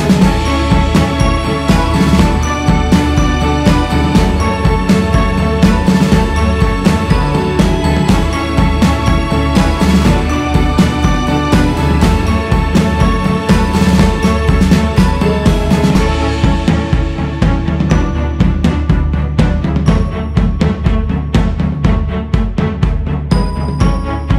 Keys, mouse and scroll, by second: 1.4 f, 4.8-5.6 scroll down 2, 5.6 click, 8.3 click, 8.9-9.5 scroll up 3, 9.5-11.4 drag, 11.4-12.8 scroll up 6, 12.8-14.3 drag, 14.3 shift+c, 15.0-15.5 scroll up 1, 16.1-17.6 drag, 17.6-18.2 scroll down 4, 18.7 click, 19.9-20.7 scroll up 2, 20.7-21.5 scroll up 2, 21.5-23.2 drag, 23.2-23.5 scroll down 5.